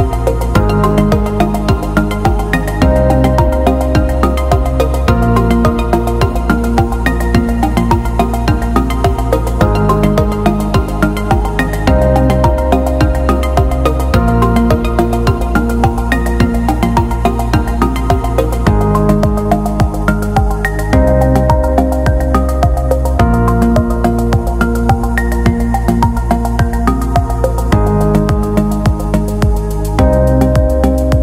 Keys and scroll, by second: 18.7 ctrl+=, 21.7 ctrl+z, 27.9 ctrl+=.